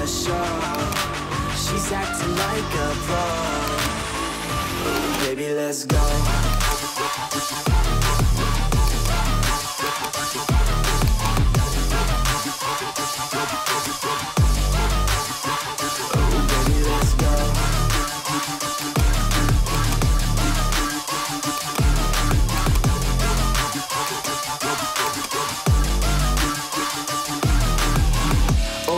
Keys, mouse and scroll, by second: 0.3 typing, 0.8 alt+click, 5.5 typing, 6.8 click, 6.8 1, 8.4-8.9 typing, 9.0 click, 10.0 click, 10.0-10.9 typing, 11.2 click, 13.8 click, 18.0-18.5 scroll, 18.9 click, 19.8 click, 21.7 click, 22.7 click, 24.2 click, 25.3 click.